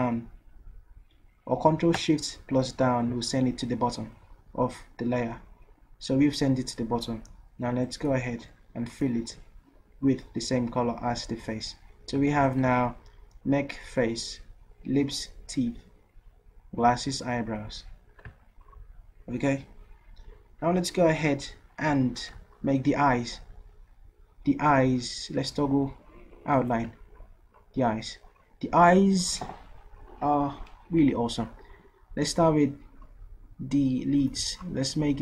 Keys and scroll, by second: 2.4 ctrl+shift+Down.